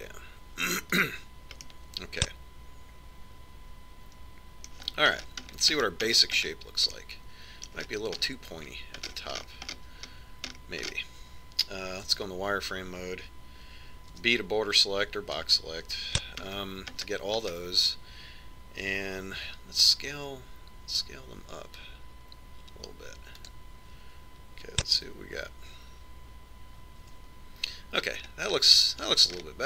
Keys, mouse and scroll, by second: 2.8-4.6 middle drag, 5.9-14.0 middle drag, 13.3 z, 15.4 b, 17.3-18.8 middle drag, 20.7 s, 26.3 z, 28.4 Tab, 29.5-29.6 middle drag.